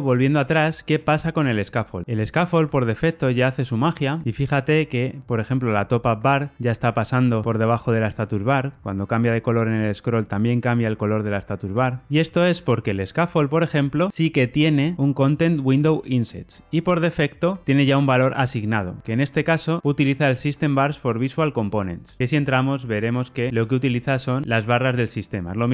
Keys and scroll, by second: 13.5 super+b, 18.1 super+b, 22.2 super+b, 23.8 super+b.